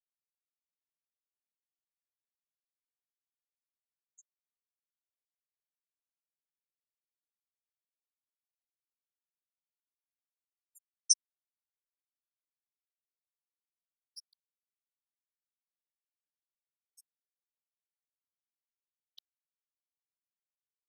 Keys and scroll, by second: 17.4 ctrl+Up.